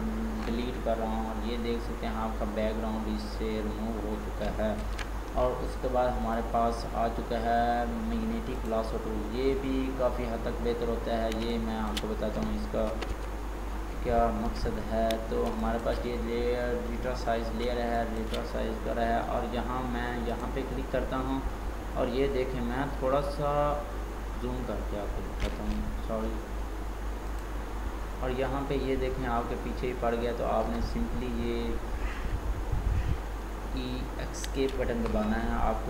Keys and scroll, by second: 4.9 ctrl+d, 12.9 ctrl+z.